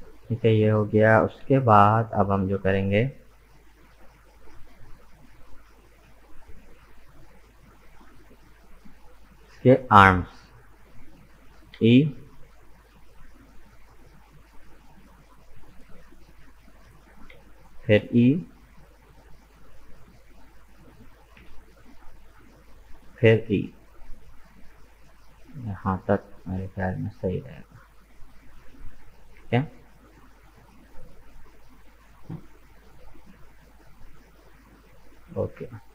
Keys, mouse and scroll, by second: 4.4 click, 5.3 right click, 5.9 shift+right click, 6.3-9.4 middle drag, 9.5 KP_1, 11.8 e, 17.3 e, 21.4 e, 30.3 Tab, 30.7-33.8 middle drag, 34.8-35.1 scroll down 2, 35.1-35.9 middle drag.